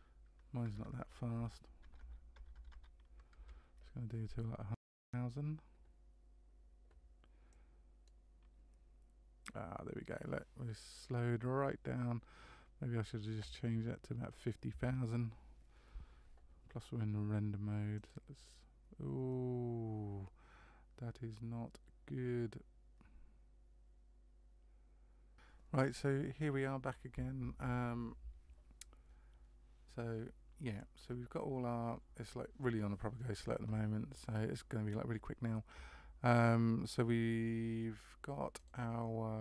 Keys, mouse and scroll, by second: 0.8 BackSpace, 1.9 KP_0, 2.5 KP_0, 2.7 KP_0.